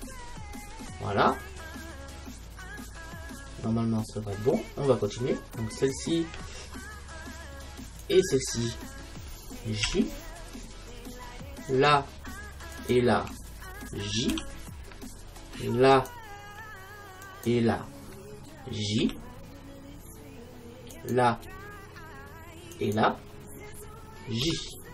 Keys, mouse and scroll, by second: 0.6-3.1 middle drag, 5.8-9.9 right drag, 9.9 j, 11.8-14.8 right drag, 14.4 j, 16.0-24.9 right drag, 19.0 j.